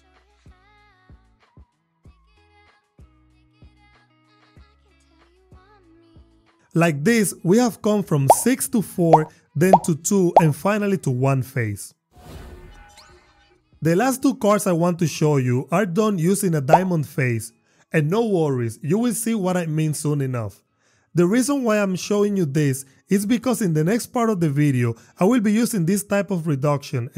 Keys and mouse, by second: 0.1 click, 1.1 ctrl+x, 1.6 k, 2.0 click, 2.4 click, 2.7 Return, 3.2 Tab, 4.1 drag, 5.0 shift+click, 5.3 e, 5.6 y, 5.8 click.